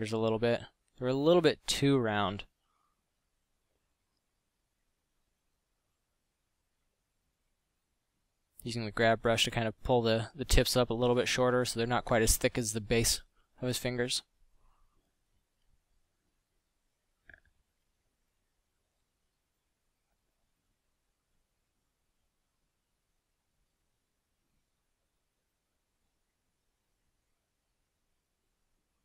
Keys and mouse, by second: 5.2 f, 8.2 ctrl+z, 9.0 f, 10.1 ctrl+z, 13.3 f, 15.2 middle drag, 16.4 Tab, 16.7 a, 17.2 ctrl+Tab, 19.4 Tab, 20.2 f, 23.6 f, 27.5 f.